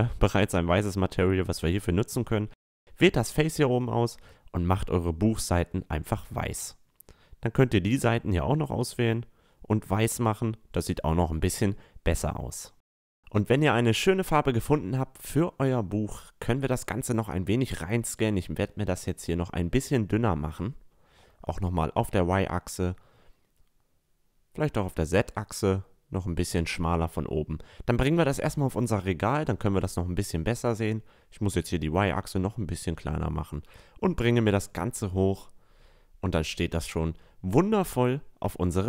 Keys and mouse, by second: 0.0 Tab, 1.2 click, 3.4 Tab, 3.4 click, 3.6-4.0 right drag, 3.7 click, 4.0-4.7 drag, 4.2 a, 4.7 right click, 4.9 middle click, 5.9 Tab, 6.6 right click, 7.3 right click, 7.7 right click, 9.2 drag, 9.2 right drag, 9.7 click, 9.7 right click, 9.9 Tab, 10.4 drag, 10.8 drag, 11.2 click, 11.3 middle click, 11.6-12.1 middle drag, 12.7-15.4 middle drag, 15.4-17.1 right drag, 15.8 middle click, 16.3-17.1 drag, 16.8 s, 17.4 middle click, 19.6 middle drag, 20.2 s, 22.9-24.2 middle drag, 23.3 s, 26.1-27.8 middle drag, 26.8-28.5 drag, 29.5-31.8 middle drag, 30.4 s, 32.6-34.4 drag, 35.7-36.7 middle drag, 36.7-38.8 drag.